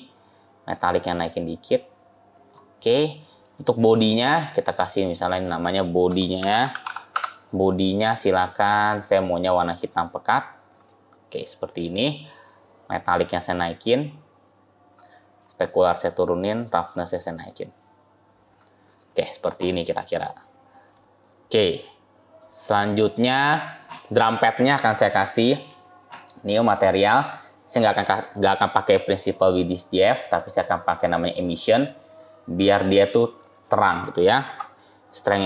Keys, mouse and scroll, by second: 0.6 click, 2.6-5.3 click, 5.1 click, 8.7 click, 11.2 middle click, 13.2 click, 15.3 click, 18.8 click, 19.0 middle click, 19.5 click, 20.1 scroll up 2, 20.8 middle click, 22.2 middle click, 23.7 click, 25.9 click, 29.1 click, 33.3 click.